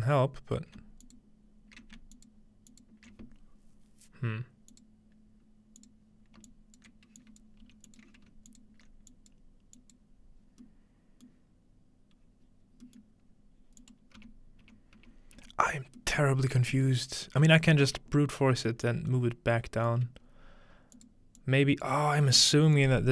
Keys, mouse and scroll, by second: 4.7 click, 5.8 click, 6.5 alt+click, 7.2 click, 7.7 g, 7.9 click, 8.3-11.4 alt+shift+drag, 11.4-13.9 middle drag, 13.8-15.8 drag, 14.2 m, 16.0-18.0 middle drag, 16.9 m, 18.3-19.9 scroll down 1, 18.7-19.9 middle drag, 19.9 scroll down 1, 20.1 middle click, 20.2-20.9 scroll up 2, 20.9 click, 21.4 click, 22.6 middle click, 22.8 click.